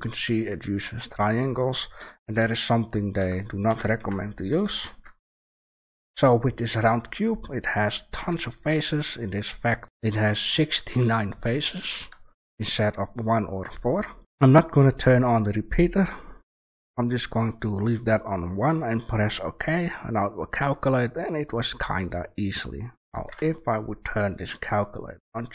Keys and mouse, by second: 2.4 middle click, 3.1 Tab, 3.9 Delete, 4.8 shift+a, 8.1 Tab, 10.9 Tab, 11.5 click, 12.2 shift+a, 14.6-19.6 drag, 21.4-21.9 middle drag, 22.6 middle click, 22.9 Delete, 23.1 shift+a, 24.3-24.7 drag.